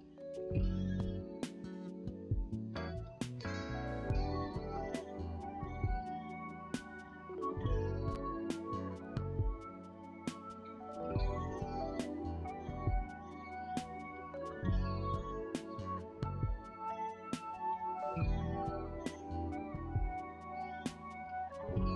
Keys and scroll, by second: 20.5 ctrl+shift+space.